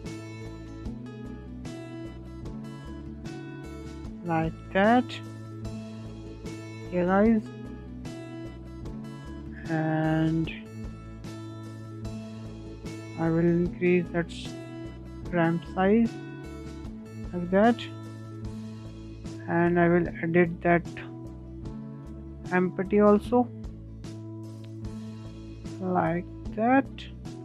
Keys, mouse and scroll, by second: 0.4 s, 3.5-4.3 scroll down 5, 4.3-6.1 middle drag, 6.1 click, 7.0 scroll down 1, 7.2-7.7 middle drag, 7.7-8.9 scroll up 1, 8.9 click, 9.6 s, 11.6 click, 11.9 middle click, 12.4 s, 14.4 scroll down 2, 14.5-15.2 scroll up 3, 14.6-14.9 middle drag, 15.2-17.1 shift+middle drag, 17.1 scroll down 2, 17.4-19.9 middle drag, 19.9 click, 21.1 click, 21.6-22.6 middle drag, 22.6-23.3 scroll up 1, 23.3 click, 26.3 scroll down 3, 26.5 scroll up 1, 26.5-27.4 middle drag.